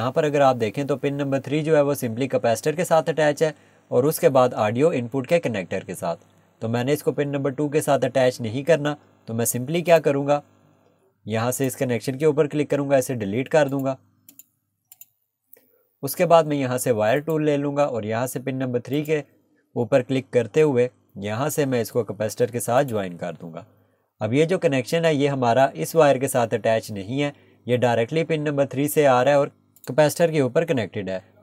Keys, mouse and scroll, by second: 9.9 click, 12.7 Delete, 13.7 click, 15.2 Delete, 17.2 click, 22.8 click, 30.4-30.8 scroll down 1.